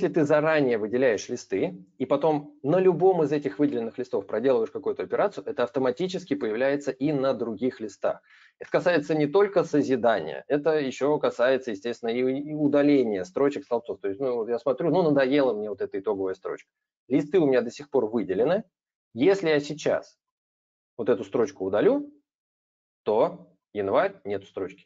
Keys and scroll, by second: 21.3 ctrl+-.